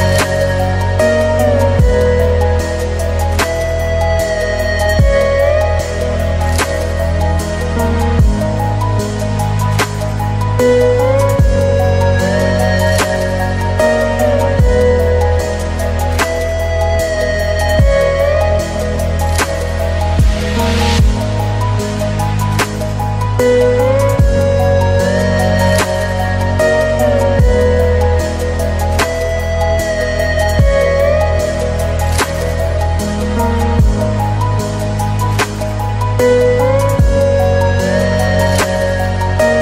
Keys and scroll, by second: 7.2 ctrl+space, 9.8 ctrl+space, 24.1 ctrl+alt+space, 30.9 ctrl+i.